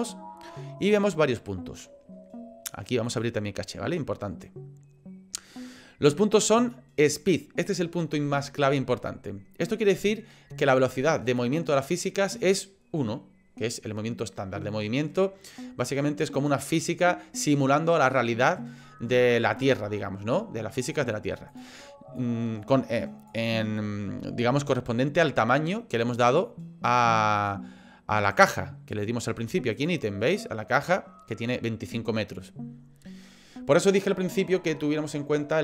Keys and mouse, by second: 3.1 click, 11.3 click, 15.2 middle click, 21.5 click, 22.3 click, 26.9 click, 27.4 click, 28.2 click, 29.7 click.